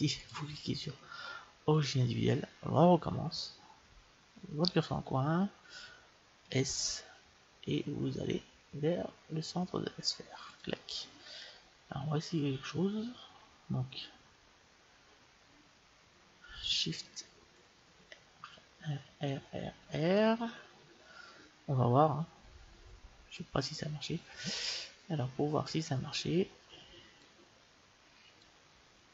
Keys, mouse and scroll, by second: 0.2-2.1 drag, 6.4 s, 17.8-19.8 typing, 26.6-28.5 middle drag, 27.2-29.1 drag.